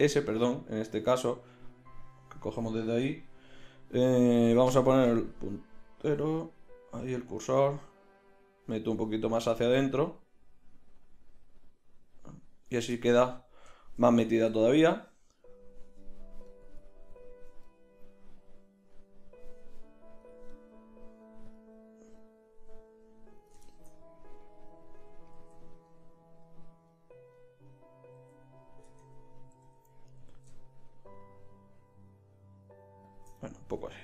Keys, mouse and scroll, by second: 4.5 ., 6.1 s, 12.9-15.2 drag, 14.5 Tab, 22.5-24.4 middle drag, 25.3 z, 28.3 z, 28.9 Tab, 29.5 a, 29.7 a, 30.2 s, 33.4-34.0 drag, 33.9 Tab.